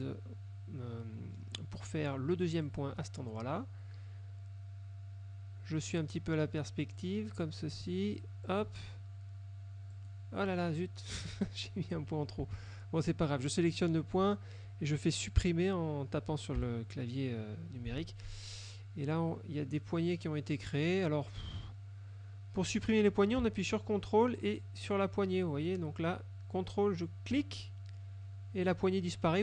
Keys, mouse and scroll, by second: 2.7 ctrl+click, 7.0 click, 8.5 ctrl+click, 10.0 click, 11.3 click, 12.0 F2, 12.8-14.0 drag, 16.7 Delete, 25.0 ctrl+click, 27.4 ctrl+click.